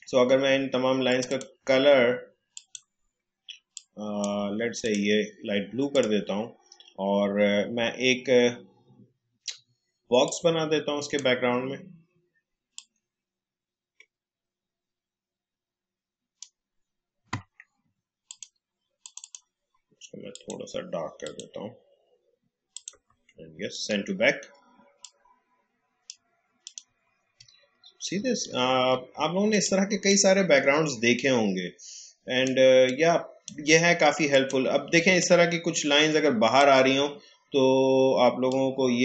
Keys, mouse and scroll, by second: 10.2-18.2 drag, 13.0 h, 23.7 right click, 25.0-26.6 drag, 27.6-27.9 alt+scroll up 1, 29.5 click, 29.9 space, 30.0 click, 31.0 space, 32.8 click, 33.0 space, 38.8-39.0 drag.